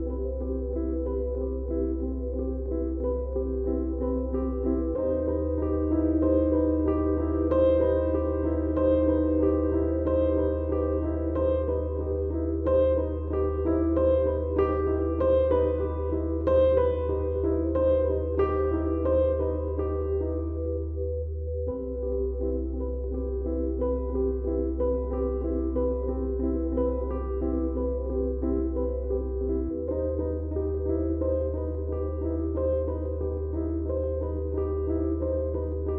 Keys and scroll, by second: 5.6 Tab.